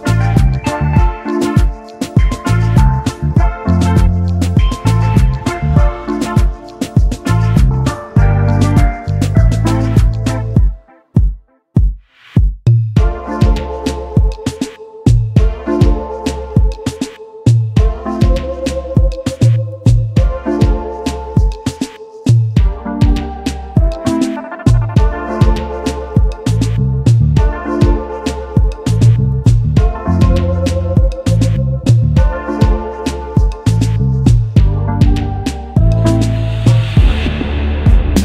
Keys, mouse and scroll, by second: 1.3 alt+scroll up 1, 5.5 e, 13.1 double click, 13.6 alt+scroll down 1, 14.4 space, 15.6-15.9 alt+scroll up 1, 15.9 alt+click, 17.0 ctrl+g, 17.9 shift+click, 19.6 double click, 24.0-24.4 alt+scroll down 1, 24.6 space, 24.7 double click, 25.0 space, 26.0 alt+scroll down 1, 26.1 alt+scroll up 1, 30.2 alt+scroll down 1, 30.2-31.0 alt+scroll up 1, 31.7 double click, 32.5 shift+click, 34.3 double click, 35.6 shift+click.